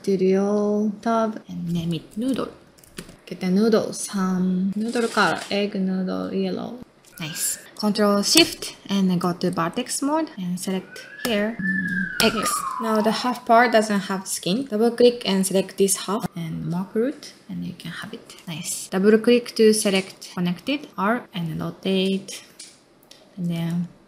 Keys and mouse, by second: 2.4 click, 3.5 middle drag, 4.1-6.8 drag, 7.2 ctrl+middle click, 8.3 ctrl+space, 9.6 ctrl+middle click, 10.1-11.2 drag, 11.2 x, 12.2 x, 12.6-13.9 ctrl+middle drag, 14.1 middle click, 15.4 click, 15.5 middle click, 15.9 middle click, 16.8 click, 17.4 middle click, 17.8 ctrl+middle click, 18.1 middle click, 18.4 middle click, 18.9 click, 20.9 r, 22.9-24.0 typing, 23.9 middle click.